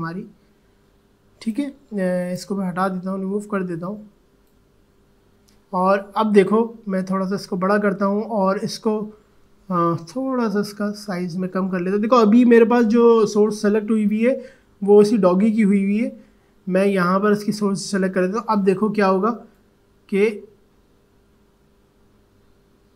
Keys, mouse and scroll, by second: 2.7-6.9 drag, 6.9 alt+scroll up 1, 9.9-11.0 typing, 12.3-13.0 typing, 15.2 alt+[, 17.2 alt+click, 19.5-22.9 drag.